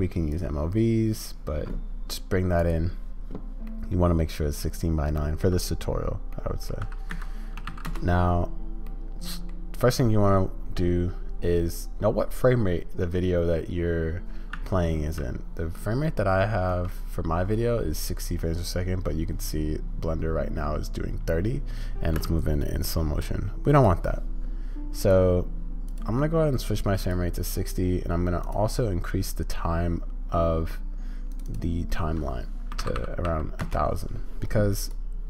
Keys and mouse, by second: 3.7-5.4 middle drag, 6.4-6.7 drag, 8.8-9.5 drag, 16.7 space, 22.1 space, 25.1 click, 26.0-27.1 drag, 28.5-35.2 drag.